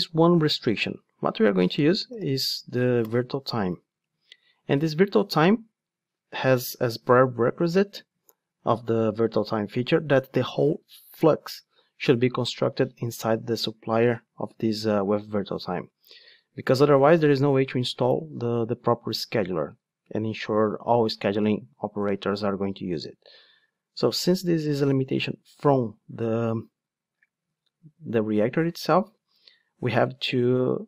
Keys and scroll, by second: 2.6 Return, 5.0 Return.